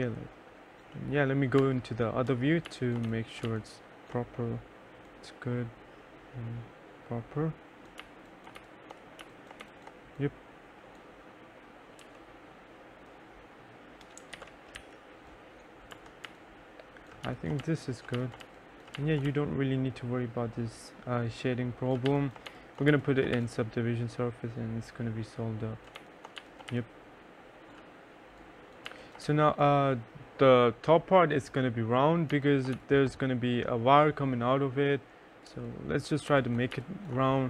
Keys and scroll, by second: 1.7 F4, 2.4 F3, 2.5-4.0 typing, 8.1 2, 8.7 1, 9.3 2, 9.7 1, 12.1 t, 14.4 ctrl+z, 14.9 e, 16.0 F1, 16.4-19.4 typing, 21.9-23.9 typing, 25.8-27.3 typing, 29.0 2, 29.3 3, 32.4 2, 32.8 1, 35.6 3, 36.4 1, 36.8 2.